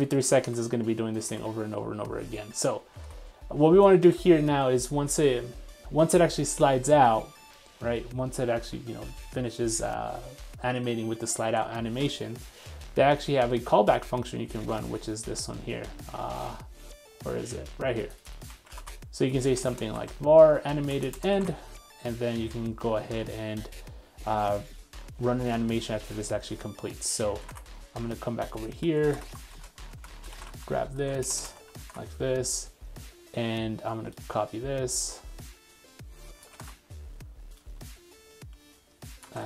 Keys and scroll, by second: 0.5 super+Tab, 3.1 super+Tab, 11.5 super+Tab, 12.3 super+3, 18.5 super+c, 18.9 super+Tab, 20.0 super+v, 21.5 super+Tab, 30.4 super+x, 31.5 super+v, 32.0 super+Tab, 36.4 super+c, 36.7 super+Tab.